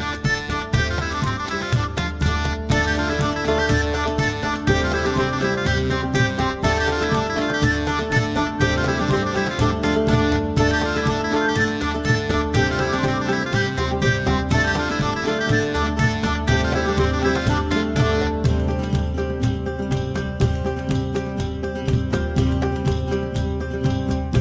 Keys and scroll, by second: 9.0 KP_0, 9.3 KP_Enter.